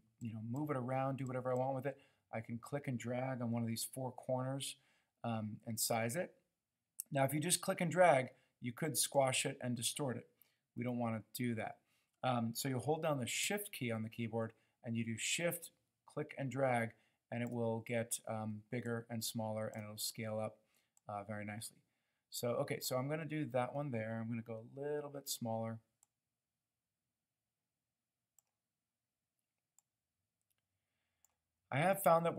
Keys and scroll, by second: 10.8 super+z.